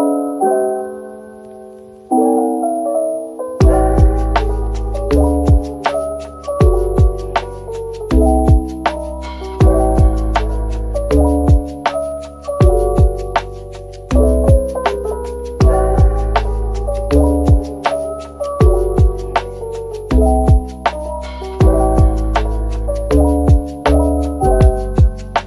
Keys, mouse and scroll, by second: 0.3-1.1 scroll down 1, 1.1-2.8 typing, 4.5-5.9 typing, 8.1 middle click, 9.8 shift+click, 10.9-11.7 typing, 13.0 middle click, 14.0 shift+click, 18.9 typing, 19.9 typing, 21.9 click, 22.2 middle click, 22.8 shift+click, 23.6 middle click.